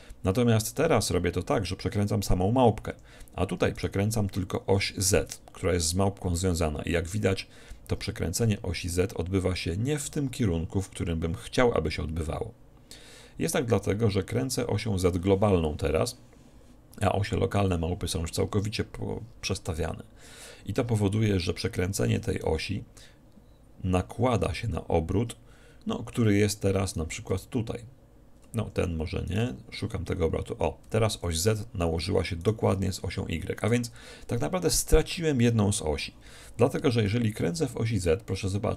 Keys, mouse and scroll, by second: 3.9-5.6 right drag, 5.0 r, 22.1 r, 26.8-28.6 right drag, 27.4 r, 28.6 click, 29.4-31.2 drag, 29.4 r, 32.5-34.2 right drag, 37.1 r.